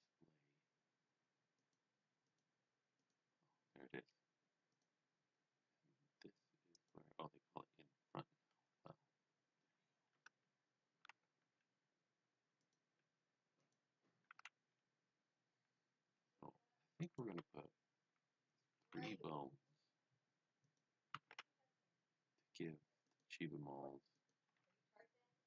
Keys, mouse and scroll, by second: 1.5 click, 2.2 click, 3.5-4.7 scroll down 2, 4.7 click, 5.2-6.7 scroll down 1, 6.7 click, 8.4 scroll up 1, 10.1 Tab, 10.9-11.9 typing, 12.5 right click, 13.6 click, 13.9-14.8 typing, 17.0 click, 17.4 e, 20.7 click, 20.9-21.8 typing, 23.1 click, 24.2 click, 24.2-25.1 typing.